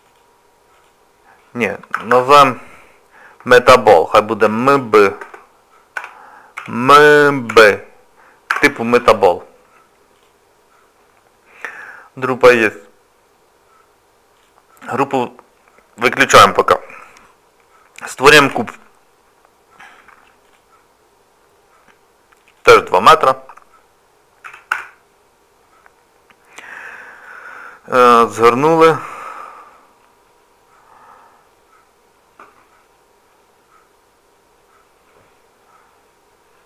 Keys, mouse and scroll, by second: 0.1 click, 2.1 BackSpace, 14.4 click, 18.4 shift+a, 22.5 click, 27.2 click, 28.2 shift+middle click, 33.2 scroll down 1.